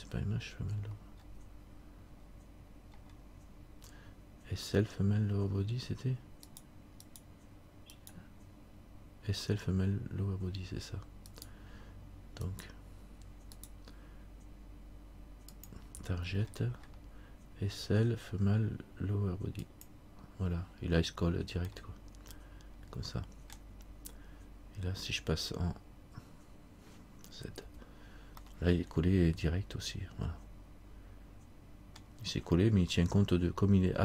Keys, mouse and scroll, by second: 7.2 right click, 15.7 right click, 15.7 click, 21.9 middle click, 28.5 z, 28.6 middle click, 32.9 scroll up 1.